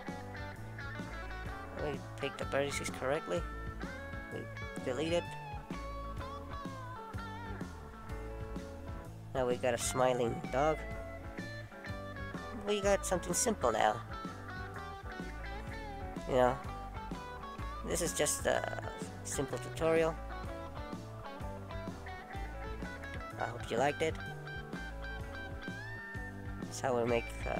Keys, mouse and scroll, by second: 2.8 scroll up 1, 3.0-4.0 scroll down 2, 4.0 scroll down 1, 4.0 middle click, 9.3 middle click, 16.4 middle click, 17.2-17.8 scroll up 1, 17.8-18.9 scroll down 2, 19.5 click.